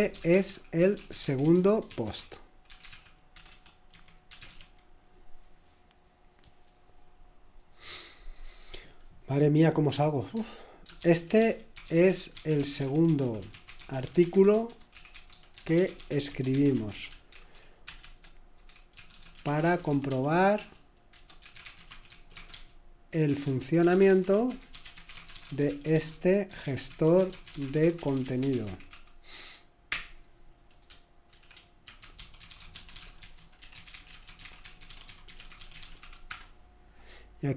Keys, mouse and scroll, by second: 0.0-5.0 typing, 10.4 Tab, 10.7-29.9 typing, 31.1-37.2 typing.